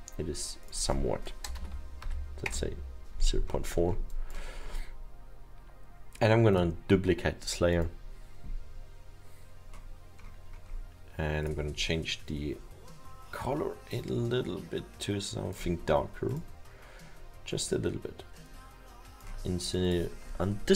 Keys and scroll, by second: 1.6 ., 2.5 Return.